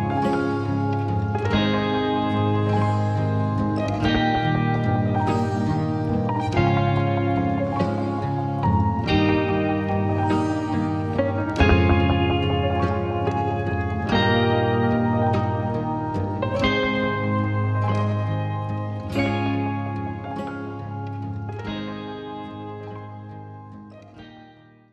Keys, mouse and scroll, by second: 0.8-1.5 alt+scroll down 1, 1.5 typing, 4.9 click, 5.6-6.9 scroll down 2, 5.6 typing, 6.9-7.6 alt+scroll up 1, 9.2 click, 9.2 typing.